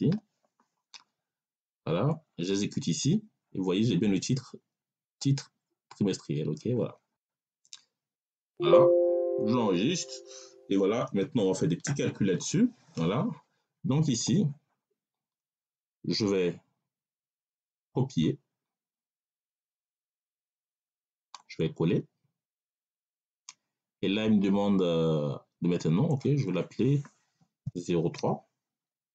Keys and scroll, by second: 27.5 0, 28.1 3.